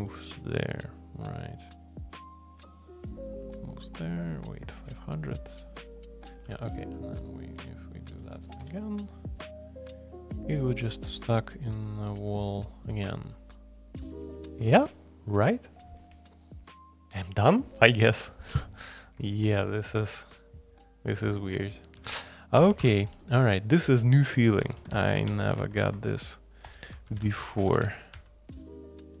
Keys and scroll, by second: 6.8 alt+p, 7.1 alt+p, 8.2 alt+p, 8.6 Return, 22.0 super+c, 22.6 Escape, 22.8 space, 22.9 Tab, 24.6-25.8 typing, 25.2 Escape, 26.6 Return, 26.8-29.2 typing.